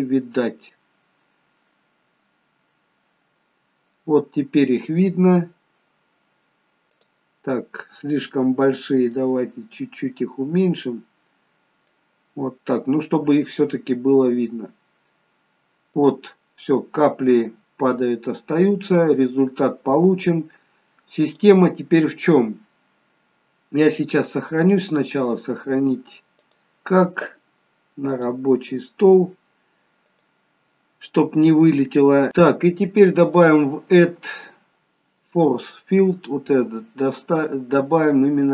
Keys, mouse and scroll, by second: 3.1-4.0 scroll up 1, 7.4 click, 9.2 click, 13.7 click, 16.4 click, 16.7-17.1 scroll up 2, 17.1 middle click, 19.5 middle click, 19.5-21.1 scroll down 3, 21.4 click, 24.9 click.